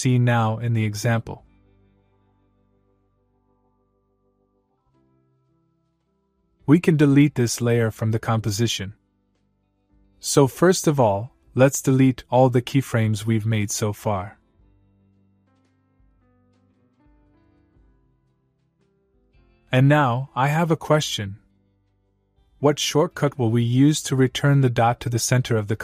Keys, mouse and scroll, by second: 4.9 click, 6.6 click, 9.5 click, 13.8-16.0 click.